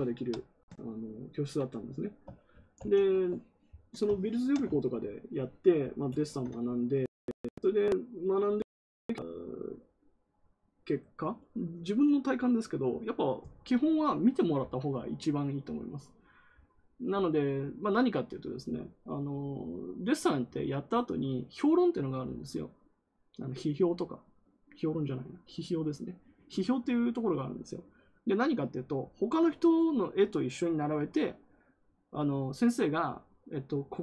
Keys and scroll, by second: 2.7 ctrl+w.